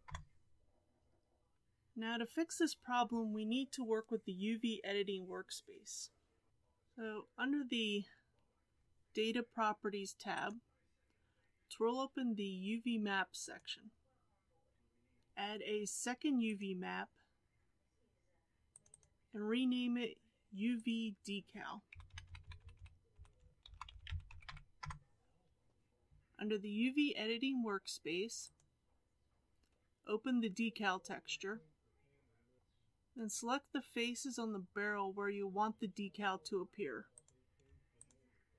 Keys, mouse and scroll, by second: 16.6-24.8 drag, 24.8 Delete, 28.5 click, 32.6 scroll up 6, 37.2 click, 38.1 shift+click.